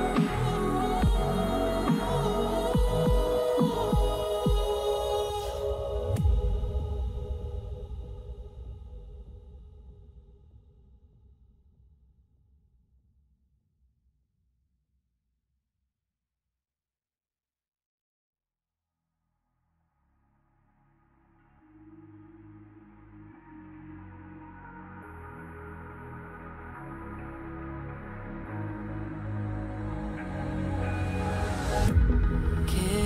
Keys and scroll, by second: 0.9 h, 4.2 b, 5.3 ], 7.5 ], 10.4 ], 15.3 [, 17.1 h, 19.3 ctrl+alt+shift+e, 21.0 ctrl+j.